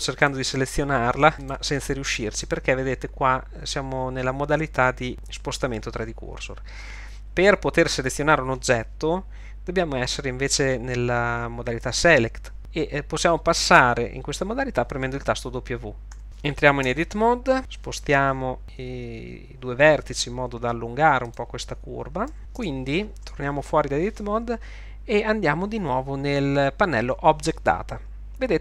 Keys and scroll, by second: 16.2 w, 16.9 Tab, 22.6 Tab.